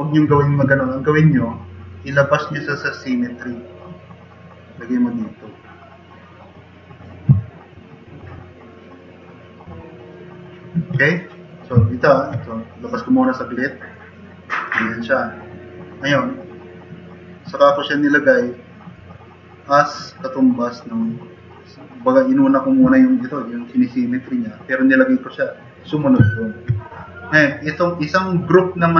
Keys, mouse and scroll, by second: 7.5-8.1 drag, 8.3 drag, 8.4 middle click, 8.5 click.